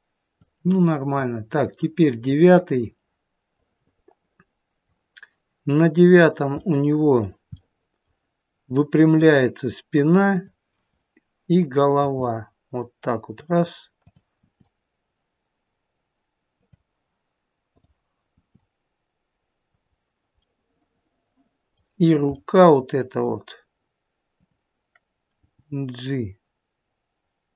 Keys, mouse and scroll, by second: 1.1 click, 3.6 middle click, 6.5 middle click, 7.6 middle click, 10.3 click, 11.9 r, 14.0 click, 14.6 r, 18.3 click, 18.3 r, 20.4 middle click, 22.3 middle click, 24.3 middle click, 24.3 click, 25.3 g.